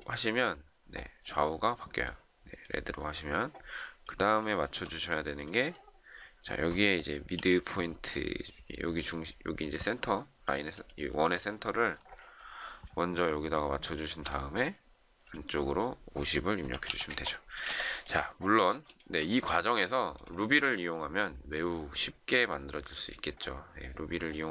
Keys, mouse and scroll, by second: 4.5 shift+middle click, 7.3 m, 11.4 shift+scroll down 1, 12.4 shift+middle click, 13.8 shift+click, 16.3-17.5 typing, 17.6 Escape, 18.9 shift+middle click.